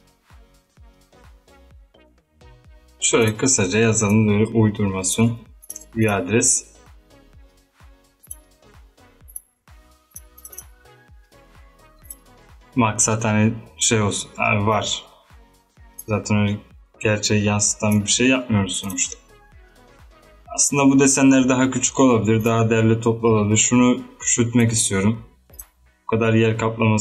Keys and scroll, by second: 0.0-0.8 typing, 8.4-9.2 typing.